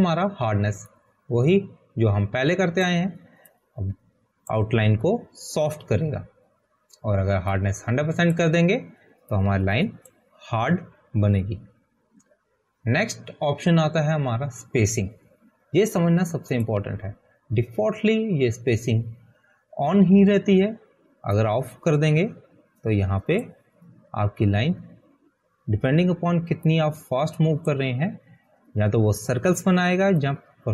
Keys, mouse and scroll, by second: 6.5 click, 11.7 click, 23.8 click, 27.0 click, 29.2 click.